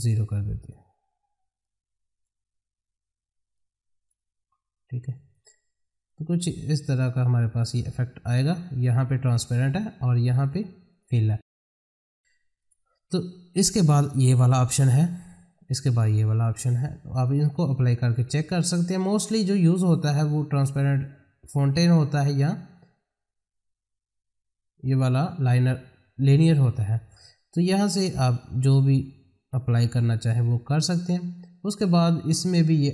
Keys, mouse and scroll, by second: 6.0-10.4 drag, 21.6 click, 27.5-32.9 drag.